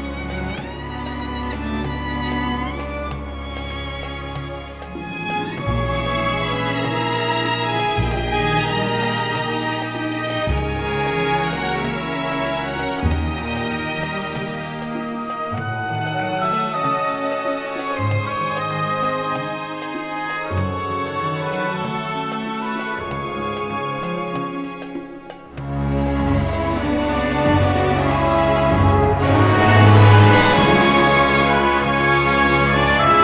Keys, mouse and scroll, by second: 0.6 click, 3.7 click, 5.2 click, 7.0 2, 7.8 click, 8.8-9.1 scroll down 1, 9.2 scroll up 1, 10.8 click, 11.9 click, 12.9 click, 14.5-15.4 typing, 15.7 click, 16.9 click, 17.3 click, 17.8 scroll up 1, 18.4 scroll down 1, 19.5 Escape, 20.2 click, 22.3 click, 24.7 scroll down 1, 25.1-25.4 scroll up 1, 26.5-28.2 drag, 28.9 click, 29.6 scroll down 2, 31.4 click.